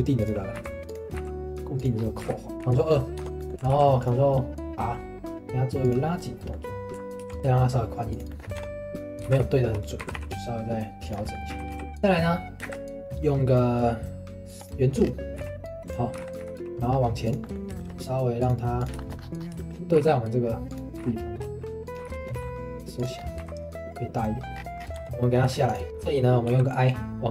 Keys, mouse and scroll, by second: 1.1 s, 2.0 scroll up 2, 2.2 g, 2.5 Tab, 2.6 ctrl+2, 2.9 middle click, 3.2 Tab, 3.4 middle click, 3.7 ctrl+r, 6.0-7.2 middle drag, 7.2 ctrl+r, 7.4 s, 8.3 shift+middle click, 8.6 Tab, 9.2 g, 10.0 g, 11.2 middle click, 11.5 s, 12.0-12.6 middle drag, 12.6 shift+a, 15.0-15.4 scroll down 2, 15.4 s, 17.4-17.8 middle drag, 17.8 right click, 18.4 click, 18.8 click, 19.0 right click, 19.0 shift+middle click, 19.2 scroll up 2, 19.6 right click, 19.6 shift+middle click, 19.9 g, 21.0 g, 22.3 s, 23.1 scroll up 1, 23.4 s, 24.5-24.9 scroll down 10, 24.9 middle click, 24.9 Tab, 25.2 middle click, 25.4 3, 25.7 click, 25.8 scroll up 1, 25.9 middle click, 26.5 i.